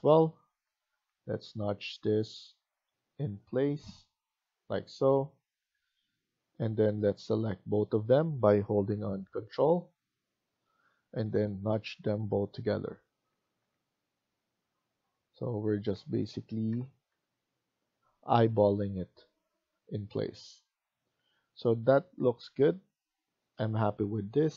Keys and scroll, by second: 0.7 Left, 1.0 Left, 1.4 Left, 1.8 Left, 2.5 Left, 5.5 Escape, 5.7 Escape, 12.0 Left, 13.1 Left, 13.5 Right, 16.7 Left, 17.1 Right, 19.3 Escape, 19.7 Escape.